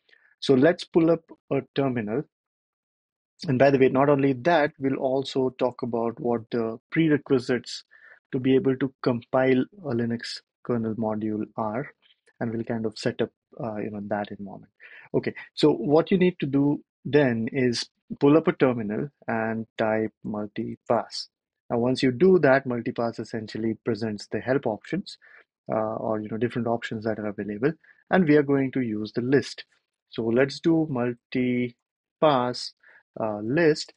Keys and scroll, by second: 4.1 super+=, 4.2 super+=, 4.4 super+=, 19.0-21.2 typing, 29.6-33.9 typing.